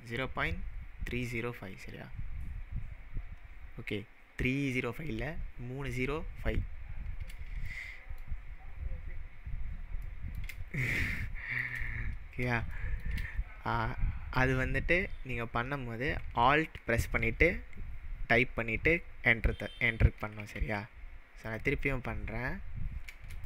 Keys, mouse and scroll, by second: 7.7-8.2 shift+middle drag, 10.6 scroll down 1, 11.3-11.7 shift+middle drag, 16.3 shift+middle click, 20.5 ctrl+z, 21.4 click, 21.6 click.